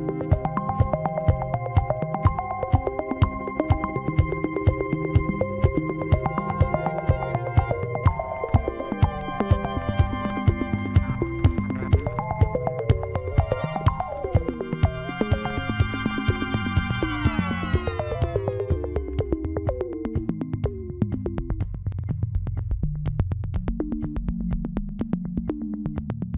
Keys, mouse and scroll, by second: 6.6-7.8 middle drag, 7.8 scroll down 5, 8.1 middle click, 8.8-12.1 right drag, 12.1-12.7 scroll up 1, 12.7 Tab, 15.0 click, 16.5 Tab, 17.3 Tab, 17.9 scroll down 1, 18.3-20.3 middle drag, 20.3 scroll up 1, 20.7-23.1 middle drag, 23.1-23.5 scroll up 3, 23.5-26.3 middle drag.